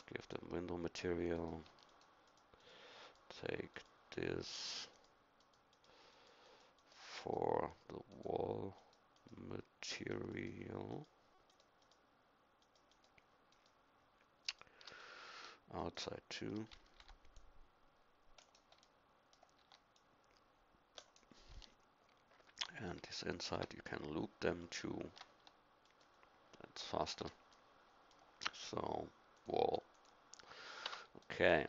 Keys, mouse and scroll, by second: 18.8 c, 19.6 c, 30.8 Tab.